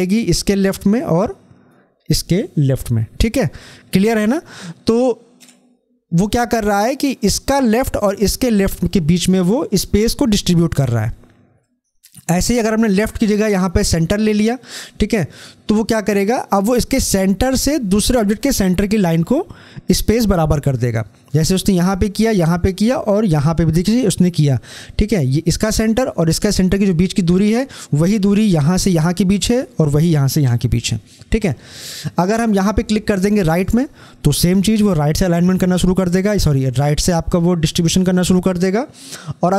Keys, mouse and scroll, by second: 3.3 scroll down 1, 11.5 scroll down 1, 11.7-14.6 drag, 15.0 click, 33.3 click.